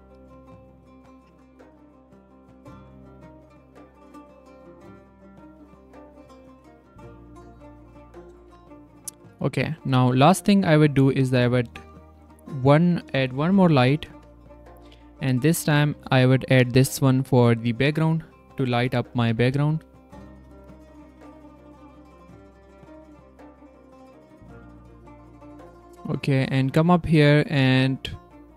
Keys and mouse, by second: 2.1-4.2 drag, 5.8 click, 7.3 drag, 8.4 z, 8.8 drag, 10.7 click, 12.6 r, 13.1 space, 14.0 alt+space, 15.5 shift+r, 16.5 c, 17.0 z, 17.4 drag, 19.1 g, 20.3-22.2 typing, 23.4 click, 24.3 click, 25.4-27.1 drag, 28.1-28.5 drag.